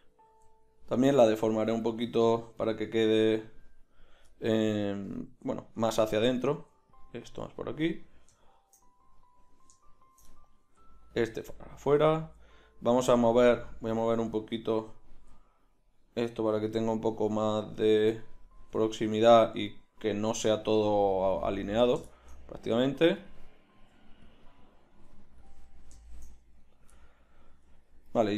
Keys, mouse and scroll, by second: 0.3 g, 3.1 g, 5.3 g, 6.5 g, 10.6 g, 12.2 g, 15.2 g, 17.5 g, 18.6 g, 20.6 g, 22.8 g, 23.7 g, 24.3-26.6 drag, 24.9 g, 26.6 right click, 27.0 middle click, 27.3 click.